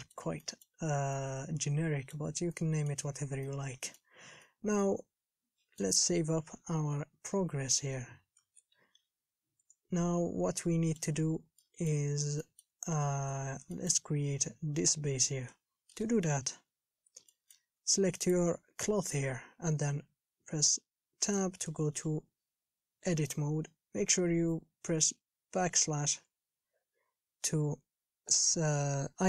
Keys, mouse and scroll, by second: 0.1-1.2 middle drag, 1.2 scroll up 1, 1.4-2.5 middle drag, 2.5 scroll up 3, 2.8 middle click, 3.3-3.7 scroll down 1, 3.7 middle click, 4.4 scroll up 1, 4.7-6.3 middle drag, 6.3 KP_1, 6.7 Home, 10.1 ctrl+shift+s, 10.5 scroll up 3, 10.8 middle click, 11.4-11.9 scroll down 3, 11.9-13.4 middle drag, 16.2 shift+space, 16.8 KP_1, 17.2-17.5 scroll up 1, 17.5-18.6 shift+middle drag, 18.6 click, 21.4 Tab, 26.3 /, 27.8 scroll up 3.